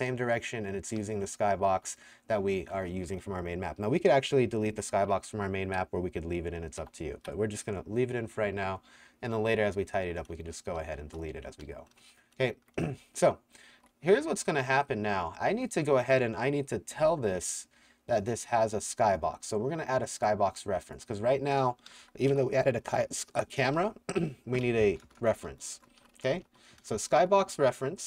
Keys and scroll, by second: 1.0-3.1 typing, 6.8 ctrl+Tab, 10.8-14.3 typing, 11.5 Escape, 15.5 w, 18.5 w, 18.9 s, 21.9-28.0 typing.